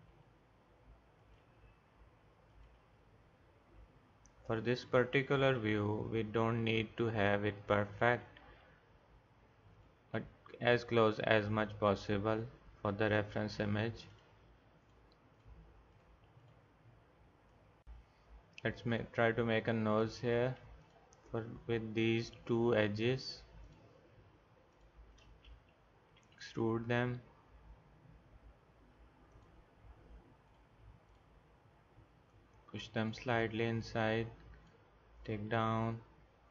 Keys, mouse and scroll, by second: 1.4 r, 2.8 e, 5.5 r, 8.3 e, 10.1 r, 11.6 e, 17.9 g, 26.2 e, 30.5 click, 32.6 click, 35.5 g.